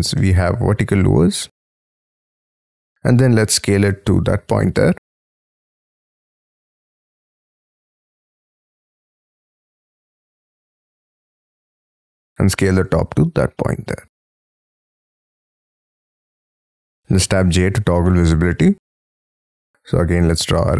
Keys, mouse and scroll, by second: 0.1 middle click, 1.1-2.1 scroll down 12, 2.1 s, 17.5 j, 18.0 middle click, 19.2 space, 19.4-19.8 scroll up 7.